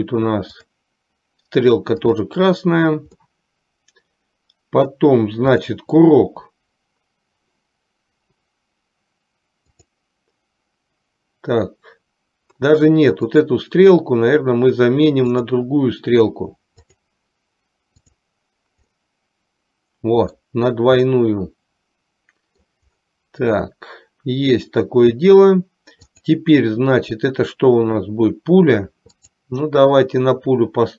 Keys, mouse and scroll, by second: 2.2 click, 3.3-5.1 middle drag, 5.6 click, 9.8 click, 13.6 click, 15.5-17.2 drag, 18.1 click, 19.1 scroll up 1, 19.3-20.6 middle drag, 21.3 scroll up 1, 21.5-22.8 middle drag, 26.1 click, 29.2-30.9 drag.